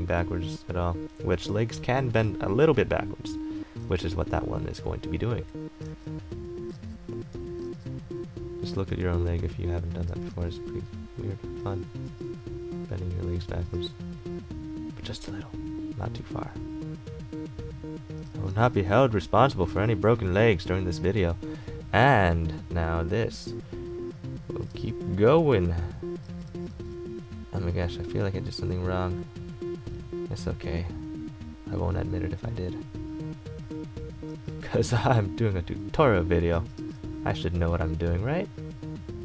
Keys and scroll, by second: 12.2 e, 13.8 a, 18.5 ctrl+z, 24.9 ctrl+z.